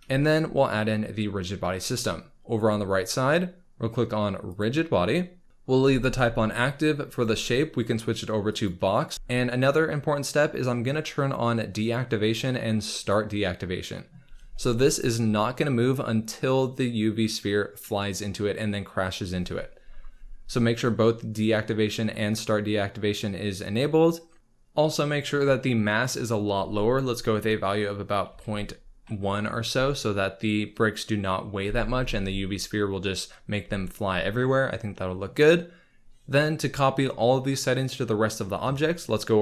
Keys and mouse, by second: 2.5 click, 4.5 click, 7.0-8.7 drag, 11.8 click, 12.9 click, 26.2-29.7 drag.